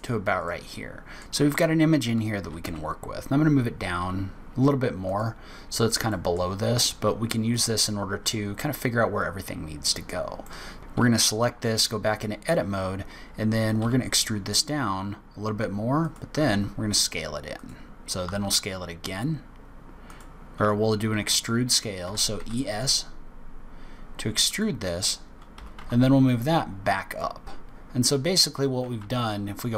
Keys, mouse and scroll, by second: 0.3 middle click, 1.4 click, 2.4 g, 5.5 scroll up 2, 6.0 middle click, 7.4 click, 10.4 middle click, 13.7 e, 16.3 s, 18.2 s, 22.0 e, 25.5 g, 28.9 z.